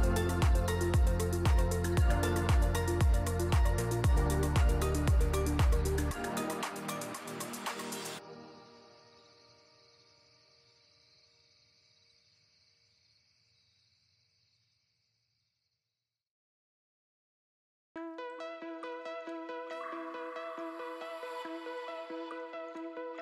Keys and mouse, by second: 0.2 click, 0.7 click, 4.9 click, 5.9 middle click, 6.2 shift+middle drag.